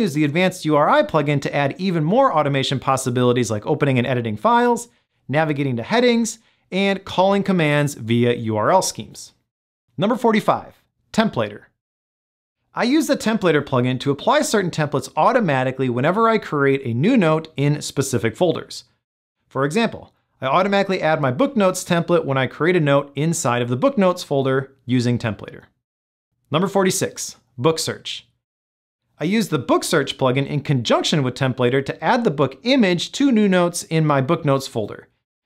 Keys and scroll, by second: 31.6 Down, 32.1 Return.